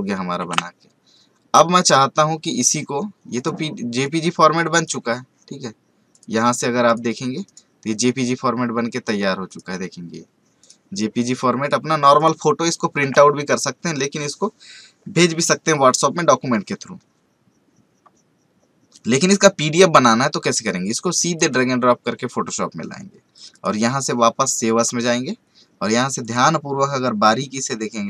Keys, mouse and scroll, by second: 0.4 ctrl+w, 1.8-6.1 drag, 7.4 right click, 7.9 click, 10.8 click, 13.0 space, 15.9 click, 20.6-23.5 drag, 25.2 scroll down 1, 26.2 click.